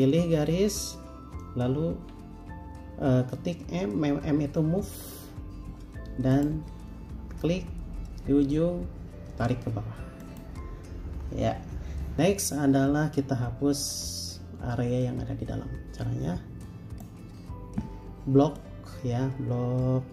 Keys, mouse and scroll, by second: 2.1 m, 12.1 Escape.